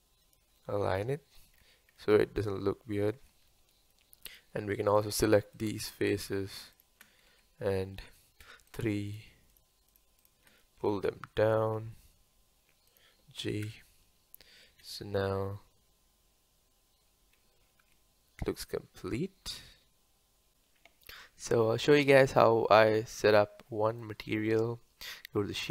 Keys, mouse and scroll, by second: 0.6-1.6 middle drag, 1.6-2.0 scroll up 2, 2.0-3.2 middle drag, 3.2 Tab, 3.5-4.3 middle drag, 4.3 click, 5.0 shift+click, 5.5 shift+click, 6.2 shift+click, 6.7 shift+click, 7.3 Tab, 8.4 3, 8.7 click, 9.1 shift+click, 9.5 shift+click, 9.9 shift+click, 10.2 shift+click, 11.5 g, 13.6 KP_0, 14.8 space, 17.8 Tab, 20.5 click, 21.9-25.7 middle drag.